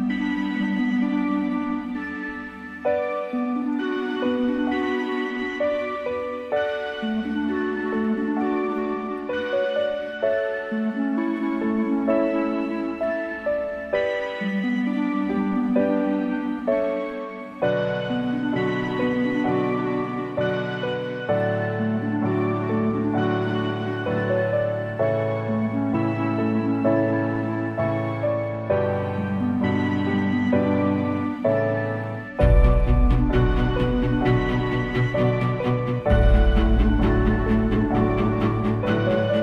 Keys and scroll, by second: 3.7 space, 4.4 space, 5.1 space, 5.8 space, 8.0 space, 8.4 space, 8.8 super+z, 9.3 space, 9.7 space, 18.0 space, 18.6 space, 21.4 super+z, 21.9 super+z, 25.3 super+z, 31.4 space, 32.0 space, 32.8 alt+super+space, 33.3 space, 34.1 space, 34.7 super+space, 36.5 space.